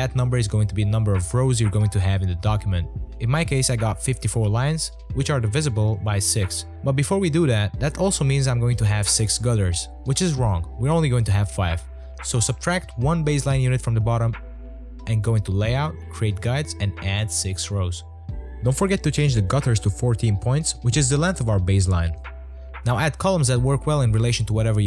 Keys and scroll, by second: 14.2-15.4 typing, 20.7-22.0 typing, 23.1-24.3 typing.